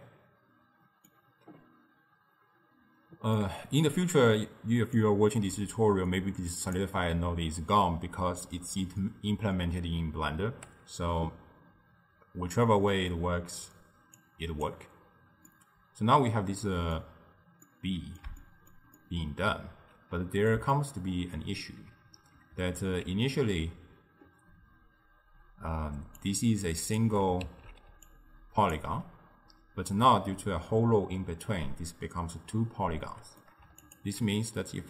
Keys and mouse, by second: 3.4-5.0 middle drag, 5.0 click, 12.6-14.2 middle drag, 14.2 click, 15.5-22.6 middle drag, 22.6 alt+q, 25.7-28.9 typing, 26.2 click, 27.5 alt+q, 28.1-28.8 drag, 33.1-34.4 middle drag, 34.4 alt+shift+click.